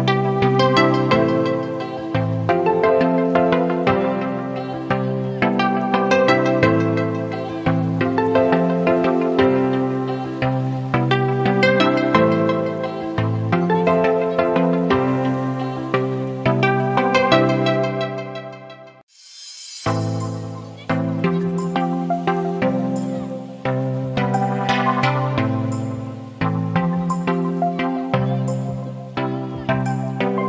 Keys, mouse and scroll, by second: 1.3 click, 9.9 click.